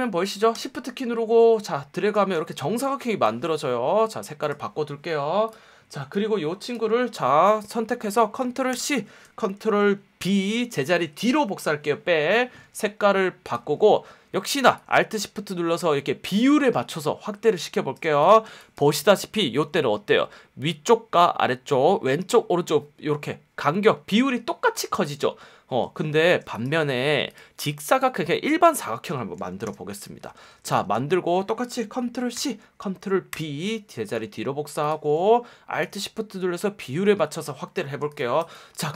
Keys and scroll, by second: 2.5 v, 8.7 super+c, 10.2 super+b, 18.3 space, 18.8 space, 20.0 F1, 24.8 F1, 26.4 space, 29.6 i, 30.4 v, 32.3 super+c, 33.3 super+b, 38.2 space, 38.7 super+space.